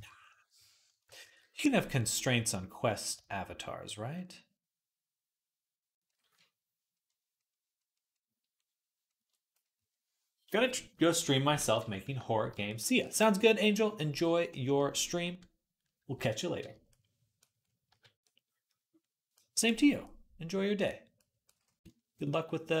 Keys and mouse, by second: 1.1 ctrl+z, 17.7 KP_Decimal, 17.8-22.8 drag.